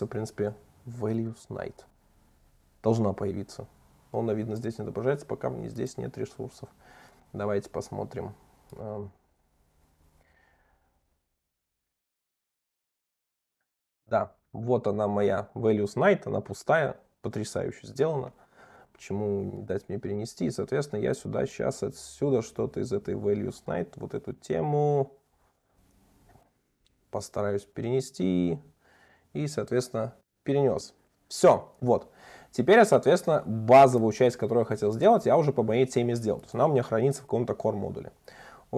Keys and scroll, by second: 26.6 super+1, 30.4 super+1, 32.0 super+1.